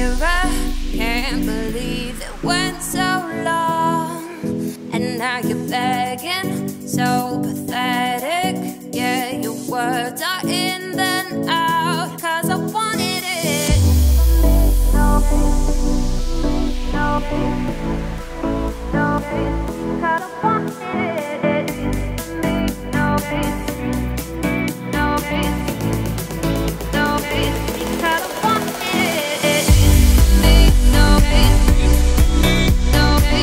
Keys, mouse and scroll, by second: 0.2-1.0 scroll up 1, 1.0 click, 2.0 Tab, 2.3-5.1 typing, 2.6 scroll up 2, 5.8 shift+middle click, 6.3 click, 6.6 scroll up 2, 6.8 g, 9.9 a, 10.3 g, 11.3 e, 13.1 scroll down 4, 13.3 a, 13.4 middle click, 14.1 scroll up 2, 14.4 shift+middle click, 14.8 `, 15.5 scroll up 1, 15.8 s, 17.5 scroll up 2, 17.8 alt+e, 23.7 a, 24.4 shift+n, 24.7 middle click, 25.0 z, 25.4 scroll down 1, 25.5 middle click, 25.9 ctrl+s, 26.5 Tab, 27.0 shift+click, 27.9 ctrl+KP_Subtract, 28.6 ctrl+s, 30.1 click, 30.5 middle drag, 31.1-31.8 scroll down 6, 31.8 Tab, 32.0-32.7 scroll up 2.